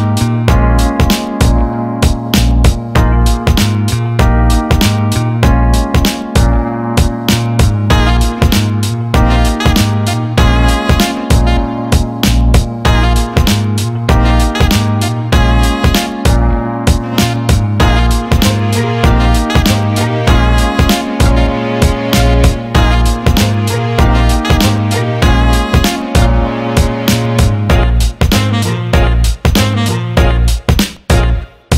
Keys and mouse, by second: 2.6 KP_3, 3.9 g, 7.9 KP_7, 9.2 KP_1, 10.4-12.6 middle drag, 12.6-13.4 ctrl+KP_8, 13.8 ctrl+KP_4, 14.1 ctrl+KP_4, 14.3-14.8 ctrl+KP_8, 15.7-17.7 middle drag, 17.7-18.5 ctrl+KP_4, 19.3-19.9 ctrl+KP_8, 20.5 s, 25.2 g, 28.9-31.7 middle drag.